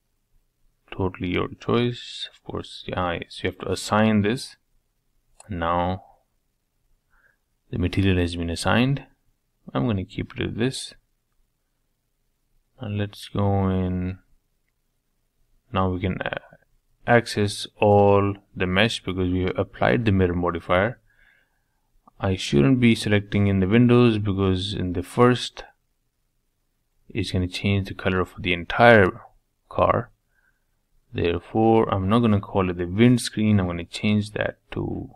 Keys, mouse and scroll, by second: 0.2 Tab, 1.2 click, 1.8 Tab, 2.2-3.2 middle drag, 3.2 Tab, 4.3-6.4 drag, 7.4 Tab, 7.7-9.5 middle drag, 9.5 scroll down 1, 9.8-10.9 middle drag, 10.9 click, 11.4 Tab, 12.0-13.7 middle drag, 13.7 click, 14.4 middle click, 14.9 shift+click, 15.4 shift+click, 15.6-16.7 middle drag, 16.7 shift+click, 17.0 shift+click, 17.1-18.3 middle drag, 18.3 shift+click, 18.6 shift+click, 18.8 middle click, 19.3 scroll down 1, 19.6 middle click, 24.3 e, 25.7 click, 34.1 ctrl+z.